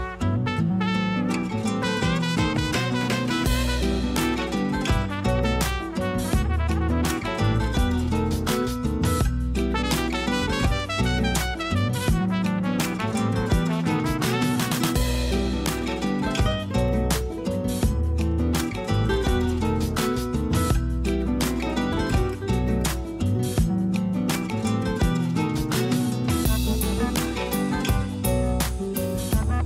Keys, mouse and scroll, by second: 1.0 click, 1.4 scroll up 1, 1.7 Tab, 2.1 a, 2.3 a, 2.7 ctrl+r, 3.9 ctrl+b, 7.0 alt+s, 8.4 a, 8.6 a, 8.7 scroll down 2, 8.9 Tab, 9.3 click, 10.8 ctrl+3, 11.2-12.8 right drag, 12.8 click, 13.9 KP_2, 14.4 KP_3, 14.9 Tab, 15.4-15.9 scroll up 1, 15.9 a, 16.6 KP_1, 17.5-18.2 scroll down 1, 18.2 a, 18.5 a, 19.1 middle click, 19.6-20.6 scroll up 1, 20.6 3, 20.8 click, 21.4 middle click, 22.3 shift+click, 22.7 scroll up 1, 23.2-24.3 shift+middle drag, 24.3 i, 26.5 KP_1, 27.1 a, 27.8 alt+s.